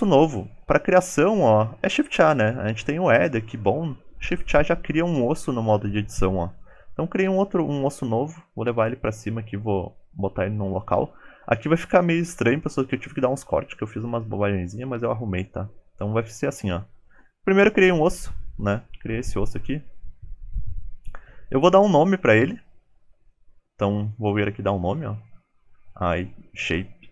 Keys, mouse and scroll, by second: 0.4-1.4 scroll down 3, 0.4 shift+a, 6.7 click, 7.4-11.0 typing, 10.4 scroll up 1, 10.6-11.5 scroll down 10, 15.5 middle click, 16.1 g, 16.4 middle click, 16.9 KP_1, 17.4 s, 17.8 g, 18.6 shift+middle click, 18.9-19.3 scroll up 2, 19.4 shift+middle click, 20.0 scroll down 3, 20.2 middle click.